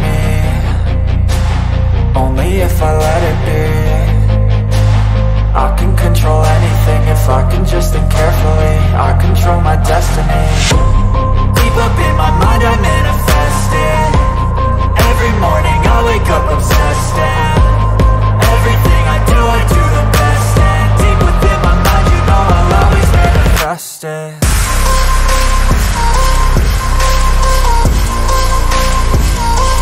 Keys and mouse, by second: 0.7 KP_0, 0.9 KP_0, 3.9 click, 5.2-6.6 drag, 6.3 KP_0, 8.4 click, 9.5-11.0 drag, 10.7 KP_0, 14.6-16.7 drag, 19.5 middle click, 21.1 click, 23.3-25.0 drag, 27.1-28.6 drag.